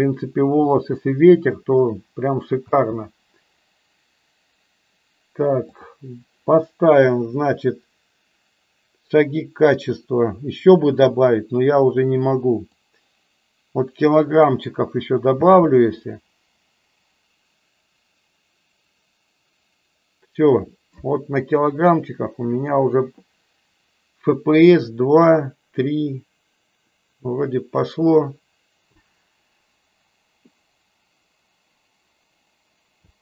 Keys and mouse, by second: 4.9 space, 12.5-14.3 drag, 15.3 space.